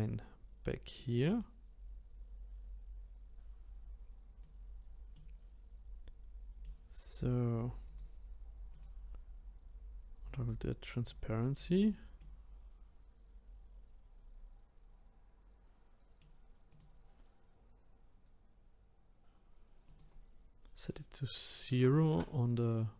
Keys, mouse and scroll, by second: 5.1-7.8 middle drag, 7.8-11.5 drag, 12.2-15.6 middle drag, 16.7 click, 19.8-22.9 drag.